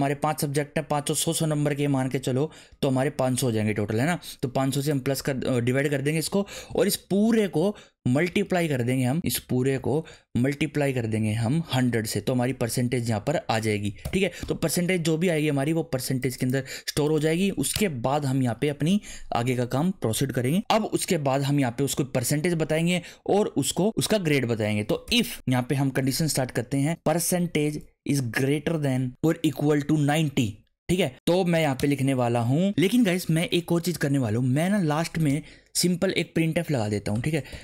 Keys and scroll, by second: 2.5-3.6 typing, 7.1 shift+Left, 9.7 shift+9, 10.1 Right, 11.8-14.0 typing, 17.7 Return, 24.7-27.4 typing, 28.6-30.4 typing, 31.1 Right, 31.5 shift+[, 31.8 Return, 32.7 ;, 35.3 Return, 36.1 Return, 36.4-37.5 typing.